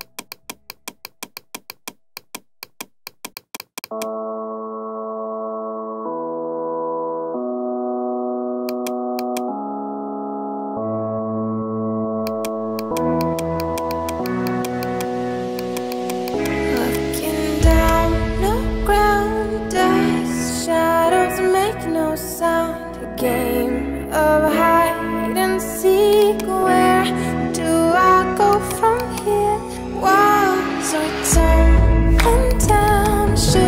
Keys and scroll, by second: 11.3 ], 27.0 4, 27.3 0, 27.4 Return, 30.3 ctrl+j.